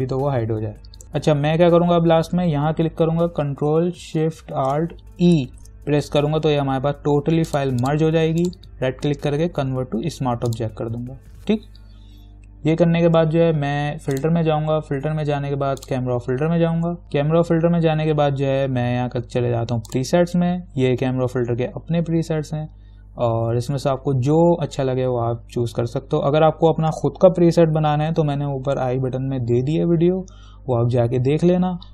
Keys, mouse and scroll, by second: 1.0 click, 5.5 ctrl+alt+shift+e, 7.7 click, 8.7 right click, 10.7 click, 14.4 click, 20.1 click, 25.8-28.1 scroll down 1.